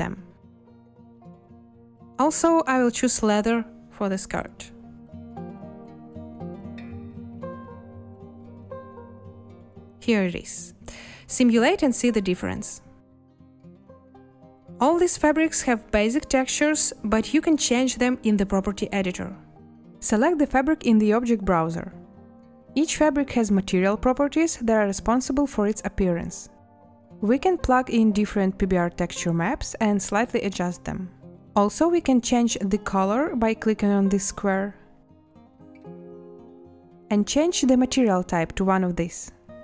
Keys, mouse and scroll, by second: 2.0-3.7 typing, 3.9 Return, 11.0 space, 19.6 space.